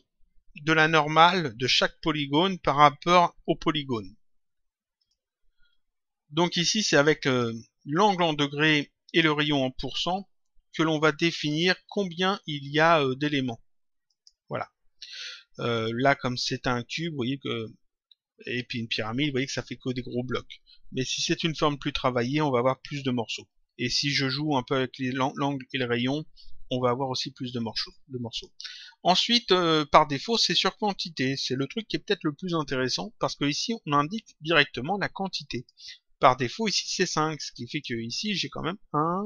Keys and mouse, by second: 4.9 click, 7.2 click, 9.0 click, 11.2 click, 14.0 click, 28.2 click, 30.0 click, 31.4 click, 35.5 click, 37.6 click.